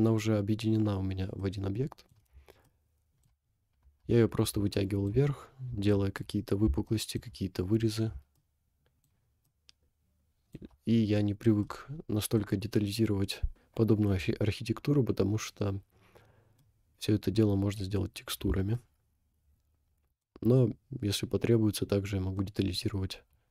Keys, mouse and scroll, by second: 1.5-2.1 middle drag, 2.7 shift+middle click, 4.1 scroll up 3, 4.8 shift+middle click, 5.2 scroll up 2, 5.9 shift+middle click, 6.4 scroll up 1, 6.9 shift+middle click, 7.7 scroll down 2, 8.5 shift+middle click, 9.5-10.4 shift+middle drag, 11.0 scroll down 2, 11.6-12.5 middle drag, 16.6-18.0 middle drag, 18.8-20.3 shift+middle drag, 22.4-23.5 middle drag.